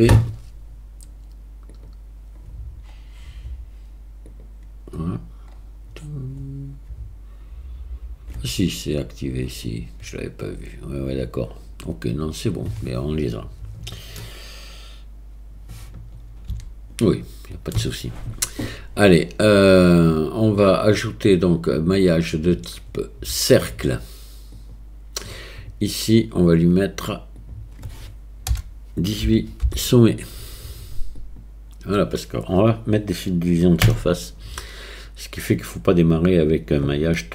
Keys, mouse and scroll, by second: 16.5 n, 21.0-24.8 drag, 26.5 click, 27.5-37.3 drag.